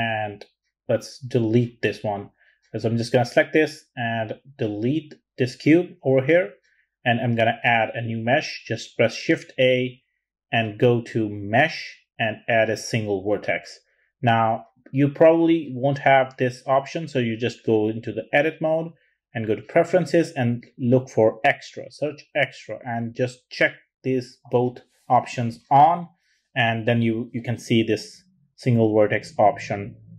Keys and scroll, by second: 7.1 shift+a, 20.8-22.0 typing.